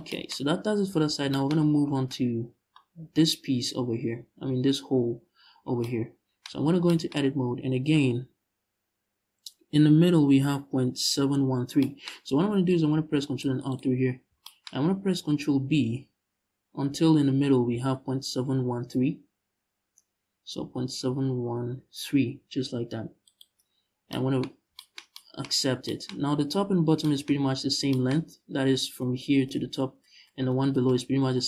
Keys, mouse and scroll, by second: 0.0-1.0 scroll up 1, 1.7-13.4 middle drag, 6.2 Tab, 12.4 ctrl+r, 13.4 click, 13.7-14.1 scroll up 1, 14.4-14.9 scroll up 1, 15.3 ctrl+r, 23.0 shift+click, 23.4-23.8 scroll down 1, 24.2 scroll up 1.